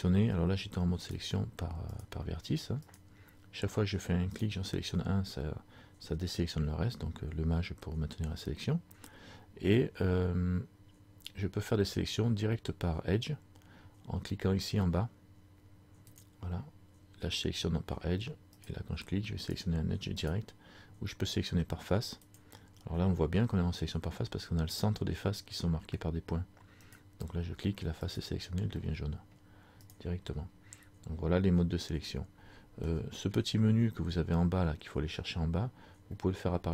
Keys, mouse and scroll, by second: 1.1 right click, 16.2 click, 18.7 right click, 19.5 right click, 22.3 click, 26.9 right click, 28.1 right click, 28.9 middle click, 30.0 right click, 31.3 scroll down 2, 32.9 shift+middle click, 36.2 middle click.